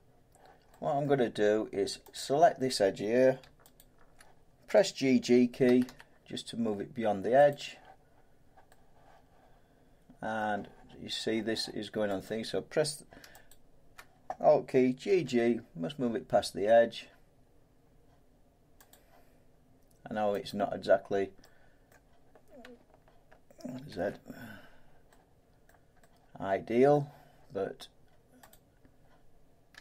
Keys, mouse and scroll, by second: 1.0 middle click, 2.2 click, 3.8 alt+click, 5.6 g, 5.8 g, 7.5 click, 10.3 middle click, 12.5 click, 13.5 alt+click, 15.0 g, 20.5 click, 21.9 middle click, 23.9 ctrl+z, 25.6 middle click, 26.9 middle click, 28.5 click.